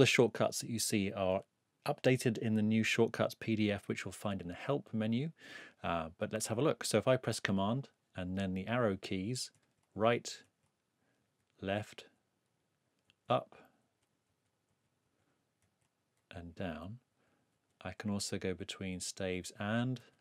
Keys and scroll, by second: 9.5 super+Right, 11.2 super+Left, 13.1 super+Up, 13.8 super+Down, 15.6 super+Right, 16.2 super+Up, 17.1 super+Down.